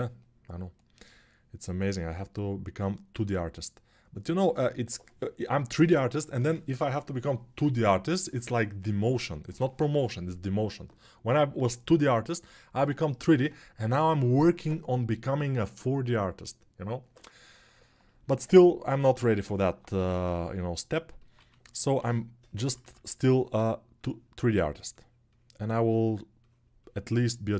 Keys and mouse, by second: 19.7 g, 21.1 1, 21.7-22.4 [, 22.6 [.